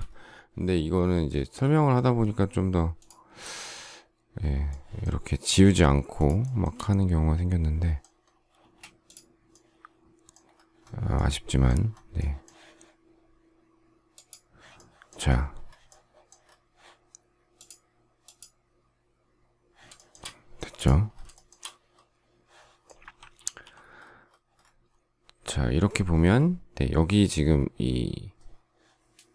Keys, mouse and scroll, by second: 4.6 shift+middle click, 6.1 shift+click, 6.4 shift+middle click, 6.6 shift+double middle click, 8.5 space, 19.9 shift+middle click, 21.3 shift+middle click, 23.4 alt+t.